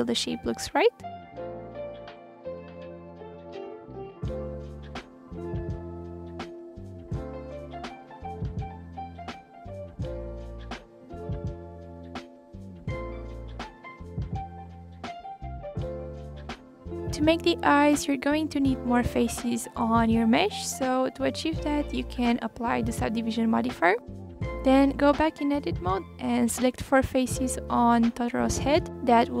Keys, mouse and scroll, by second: 0.0 ctrl+z, 0.4 click, 3.2 click, 3.5 ctrl+click, 4.1 s, 6.1 click, 6.5 r, 8.7 ctrl+click, 9.3 r, 10.1 click, 10.1 r, 10.7 ctrl+click, 10.9 r, 12.1 click, 12.2 click, 12.9 click, 13.9 alt+click, 14.1 alt+click, 14.4 s, 16.2 click, 16.3 s, 20.0 ctrl+z, 20.3 scroll up 1, 20.4 click, 20.8-21.2 scroll down 3, 21.2-21.6 scroll up 2, 21.6-23.1 middle drag, 24.5-27.3 drag, 27.3-28.1 scroll up 4, 28.1-29.4 right drag.